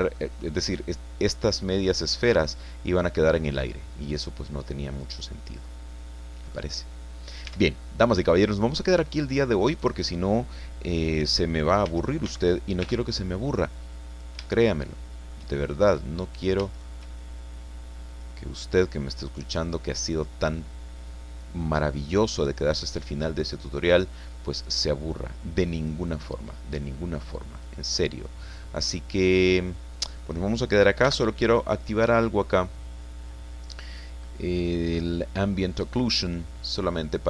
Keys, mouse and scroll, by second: 0.2 click, 2.3-6.7 drag, 7.4 Tab, 7.8 middle click, 8.0-9.5 drag, 8.9 middle click, 9.7 right click, 11.8 n, 12.8 t, 14.1 click, 14.5-15.5 shift+middle drag, 16.2 right click, 16.7 shift+right click, 18.1 click, 18.6 scroll down 1, 19.0-20.7 middle drag, 20.8 scroll down 1, 21.1-23.7 middle drag, 23.8 scroll up 1, 24.1 middle click, 24.6 right click, 25.7 click, 26.2 click, 27.1 scroll down 2, 27.3-30.4 drag, 31.0 n, 31.6-33.1 scroll down 3, 35.3 click, 36.1-37.2 middle drag.